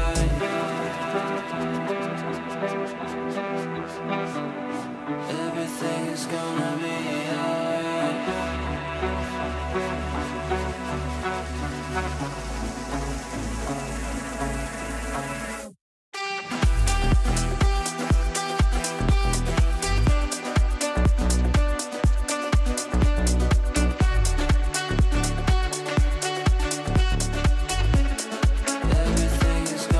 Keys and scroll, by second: 2.7 ctrl+z, 13.6 ctrl+q, 16.3 Down, 16.6 Right, 20.6 Up, 22.6 w, 23.6 d, 26.8 shift+Page_Down, 27.8 f, 28.5 shift+Page_Down.